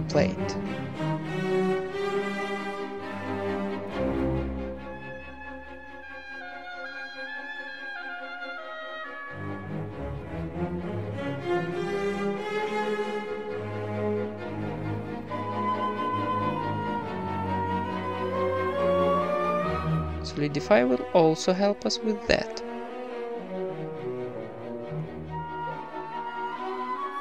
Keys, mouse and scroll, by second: 0.9-1.9 middle drag, 1.3 KP_1, 2.5 s, 3.8 middle click, 4.0 e, 4.5 alt+m, 5.2-8.3 typing, 5.5 right click, 8.7 middle click, 9.3 e, 10.4 KP_1, 10.4 g, 11.5 s, 12.8-15.3 typing, 13.8 middle click, 14.8-15.9 right drag, 16.5 s, 17.5 Tab, 17.8 ctrl+s, 17.8-18.9 right drag, 17.8 z, 17.8 a, 18.1 Tab, 18.7-20.2 drag, 20.6 click, 21.6-23.6 drag, 23.2 KP_1, 23.6 middle click, 23.7 z, 24.6-25.0 scroll up 1, 25.0-27.2 drag, 26.6 Tab.